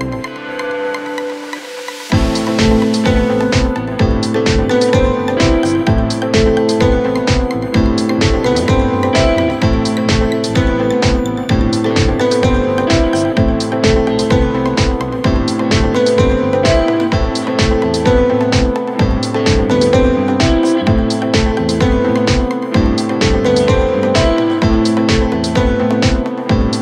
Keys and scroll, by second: 0.8 3, 1.7 p, 2.8 p, 4.1-9.0 typing, 10.0 p, 11.5 p, 12.5 p, 13.2 p, 13.8 F9, 14.1 4, 15.2 ctrl+z, 16.3 ctrl+z, 18.0 3, 18.7 p, 19.6 p, 21.2 4, 22.1 ctrl+z, 23.2 3, 23.9 p, 24.4 4, 26.3 p.